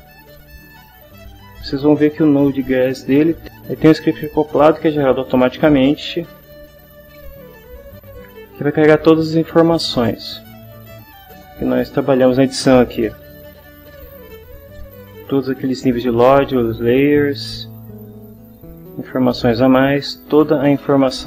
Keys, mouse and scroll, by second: 6.1 click, 10.9-14.7 drag, 18.3-21.2 drag.